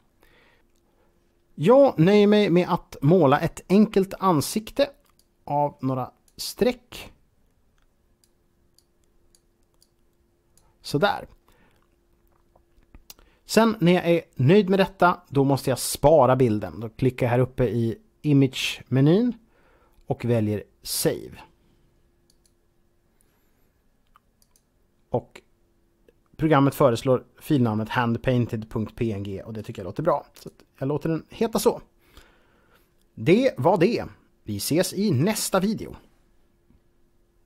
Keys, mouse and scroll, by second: 4.9 click, 6.9 click, 8.7 click, 9.7 click, 18.4 click, 22.1 click, 24.3 click, 29.4 click, 30.1 click.